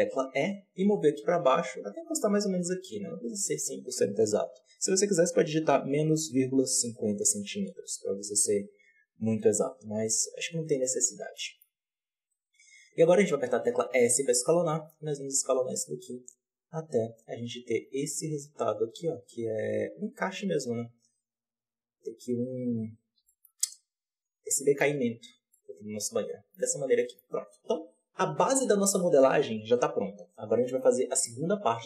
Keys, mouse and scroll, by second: 10.0-10.8 scroll up 1, 10.8 scroll up 2, 11.3-11.6 shift+middle drag, 11.6-13.5 scroll up 1, 13.5 s, 22.5-23.2 scroll down 7, 23.2-25.1 shift+middle drag, 25.1 z, 25.5-26.6 middle drag, 26.6 Tab, 26.9 middle click, 27.2 alt+a, 30.0-30.6 scroll up 2, 30.6-31.7 middle drag, 31.7-31.8 scroll down 1.